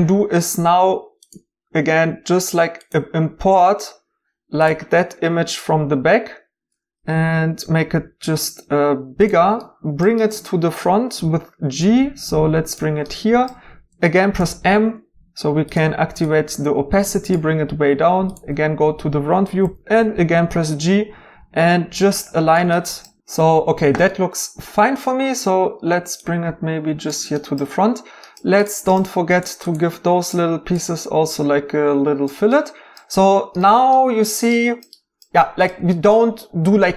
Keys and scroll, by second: 7.1 typing, 11.2 g, 14.4 m, 19.6 g.